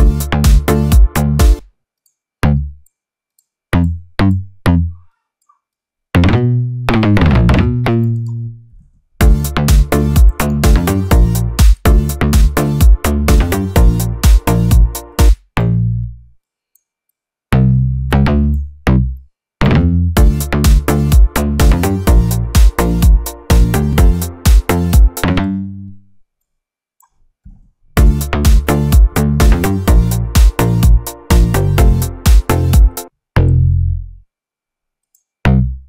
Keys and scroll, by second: 1.4 space, 8.9 ctrl+Down, 9.0 ctrl+space, 11.4 space, 15.1 space, 20.0 space, 25.0 space, 27.7 ctrl+Down, 27.8 ctrl+space, 29.3 ctrl+Down, 32.9 space.